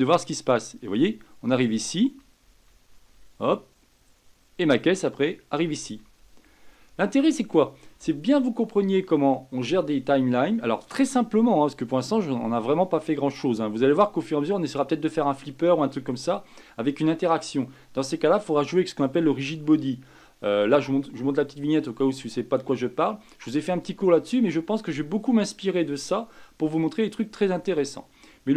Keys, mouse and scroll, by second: 1.8 Right, 2.0 Right, 2.2 Right, 2.4 Right, 2.7 Right, 2.9 Right, 3.1-6.0 Right, 6.2 Right, 6.4 Right, 6.6 Right, 6.8 Right, 7.1 Right, 7.3 Right.